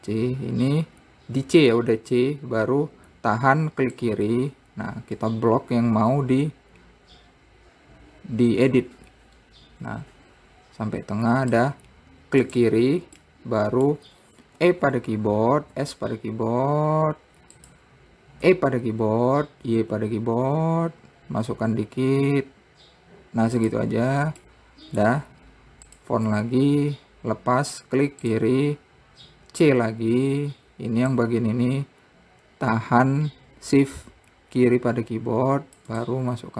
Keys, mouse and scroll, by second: 13.7-15.2 middle drag, 15.2 e, 19.0 e, 25.1 middle click, 25.8 `, 27.0-27.7 scroll up 3, 28.9 click, 30.3 c.